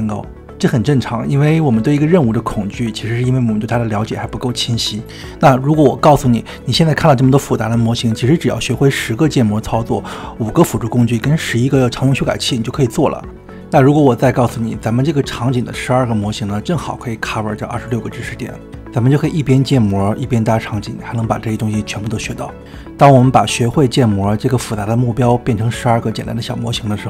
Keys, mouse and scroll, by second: 0.0 click, 0.4 ctrl+0, 0.6 middle click, 0.6 scroll up 2, 0.7 click, 0.8-2.1 scroll down 4.